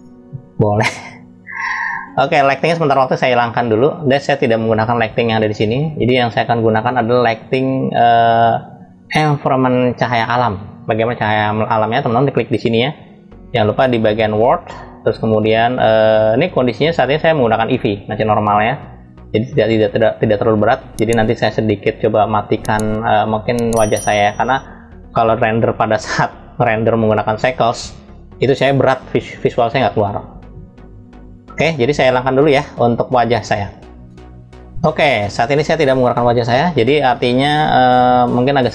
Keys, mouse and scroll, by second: 0.0 click, 4.2 click, 5.5-6.7 scroll up 2, 7.1-8.9 middle drag, 14.1 click, 16.6 click.